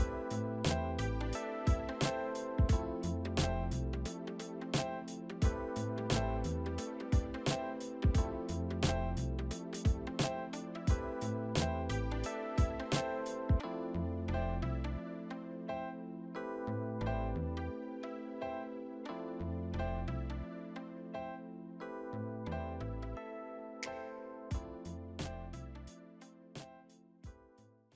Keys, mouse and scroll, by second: 3.3 alt+shift+middle click, 5.0 alt+shift+middle click, 6.1 alt+shift+middle click, 6.2 alt+shift+middle click, 9.3 F4, 10.2 w, 11.5 middle click, 12.2-14.8 scroll up 3, 15.0 alt+w.